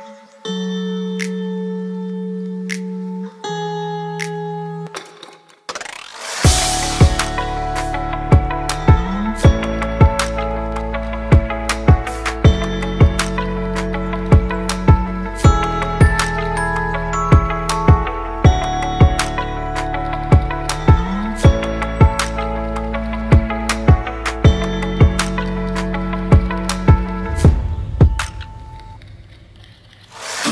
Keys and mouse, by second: 0.9 click, 2.2 click, 3.7 click, 4.9 q, 7.7 ctrl+s, 8.0 a, 8.2 a, 8.5-9.0 drag, 10.0-10.3 middle drag, 10.7 middle click, 11.5 middle click, 13.2 ctrl+1, 16.1 ctrl+1, 17.7-18.1 drag, 19.2 click, 21.0 click, 21.8-23.0 middle drag, 23.7 shift+click, 24.3 KP_1, 25.4 Tab, 26.5 ctrl+r, 28.7 click, 29.0 Tab, 29.3 middle click.